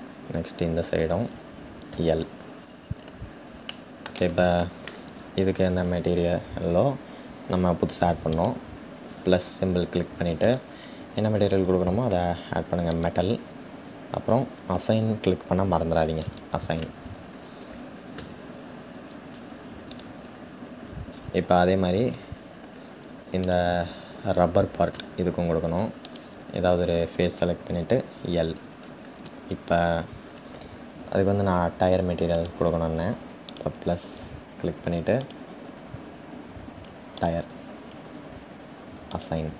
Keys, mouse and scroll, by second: 1.5-2.1 scroll up 1, 2.1 scroll up 1, 2.2-3.2 scroll down 4, 3.2-8.4 shift+middle drag, 8.4-13.0 drag, 16.3-18.0 drag, 18.0 Tab, 20.7-23.1 scroll up 6, 23.5 scroll down 1, 24.8 Tab, 33.4-39.5 drag.